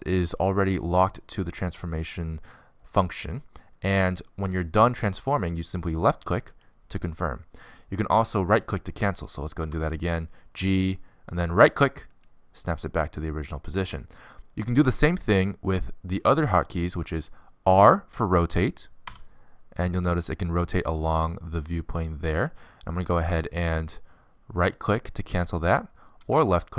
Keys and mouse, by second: 3.3 middle click, 5.3 middle click, 10.3 g, 19.4 r.